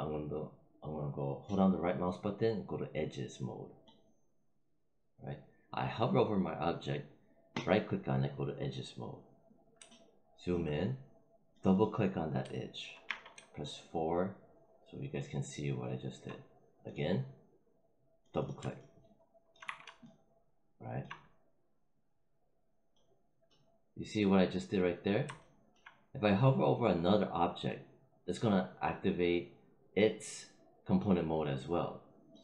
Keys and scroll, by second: 13.0 4, 19.5 5.